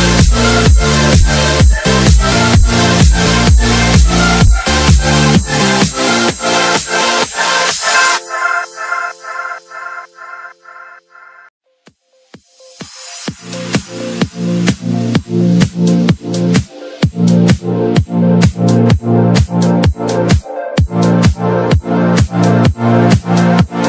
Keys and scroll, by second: 3.3 shift+F2, 3.9 F3, 7.9 F4, 11.6 ctrl+r, 12.5 Escape, 15.4 shift+F2, 16.9 F4, 20.2 shift+F2, 22.8 Escape.